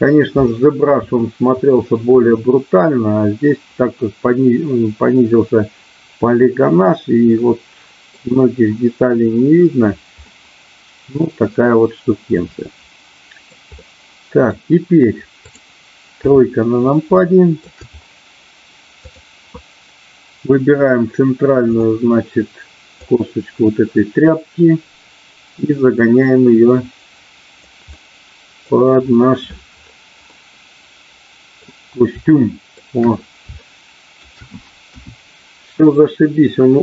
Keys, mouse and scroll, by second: 3.5-8.2 middle drag, 10.3-12.8 middle drag, 13.3 middle click, 13.8 middle click, 15.4 click, 16.3 KP_3, 17.3 middle click, 19.0-20.2 drag, 21.8 click, 23.2-27.7 drag, 27.9 middle click, 30.3-31.5 middle drag, 32.3-32.7 scroll up 1, 33.5-34.3 scroll up 1, 34.8 KP_1.